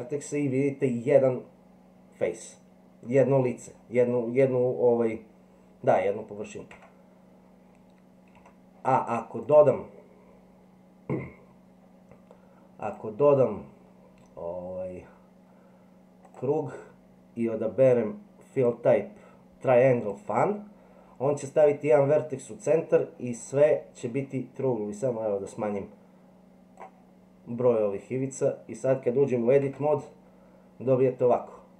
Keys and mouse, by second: 6.8 Tab, 8.4 Delete, 9.5-11.7 drag, 12.8-16.4 drag, 18.6-20.1 drag, 25.1-26.8 drag, 29.7 Tab.